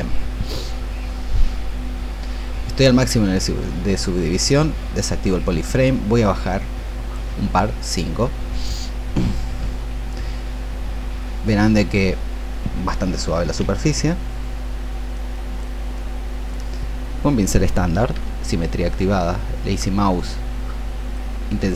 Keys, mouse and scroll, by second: 3.8 click, 10.4-21.7 drag.